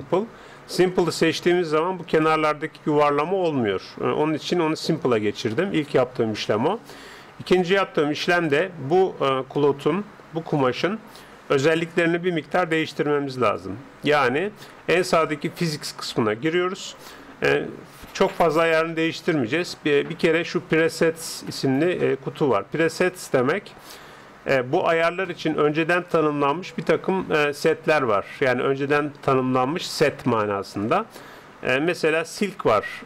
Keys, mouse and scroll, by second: 0.7-2.5 drag, 1.5-8.3 middle drag, 8.3-10.1 drag, 9.7-12.5 middle drag, 12.9-15.1 drag, 15.3-16.9 drag, 30.8-32.6 drag.